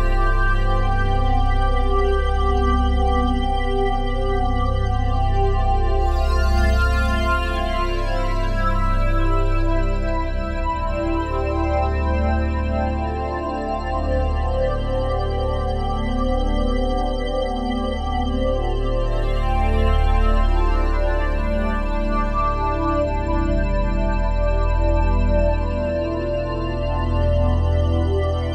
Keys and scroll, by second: 0.2 ctrl+z.